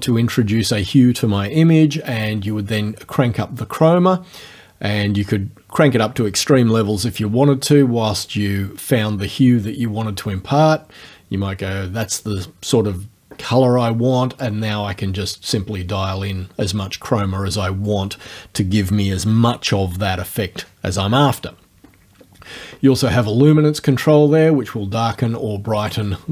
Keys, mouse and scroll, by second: 2.5-7.3 drag, 8.3-12.4 drag, 14.5-18.0 drag, 23.3-26.2 drag, 25.9 right click.